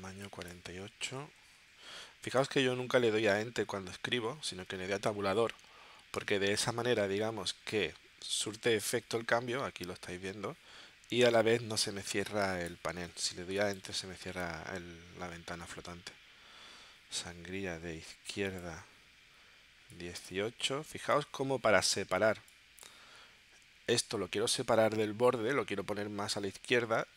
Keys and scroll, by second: 1.0 4, 1.6 8, 6.9 Tab.